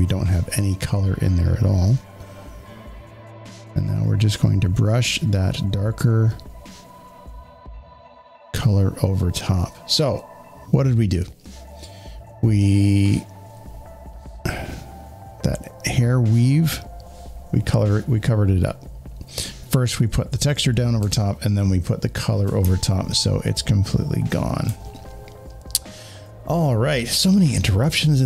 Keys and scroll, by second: 20.9 z, 21.5 z, 22.5 space.